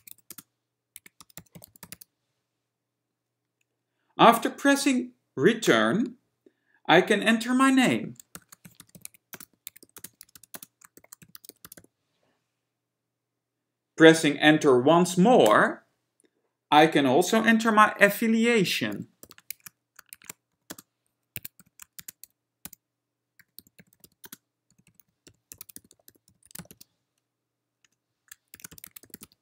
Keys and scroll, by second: 0.0-2.7 typing, 5.8 Return, 9.0-12.5 typing, 15.6 Return, 19.2 shift+c, 20.4 shift+s, 20.8 ,, 20.8 space, 21.9-27.4 typing, 28.0 Return, 28.8-29.4 typing.